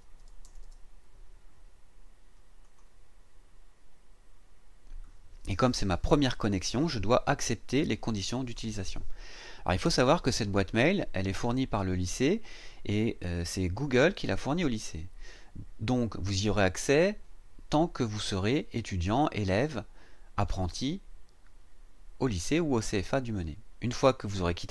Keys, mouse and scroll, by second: 0.0-0.6 typing, 2.6 click.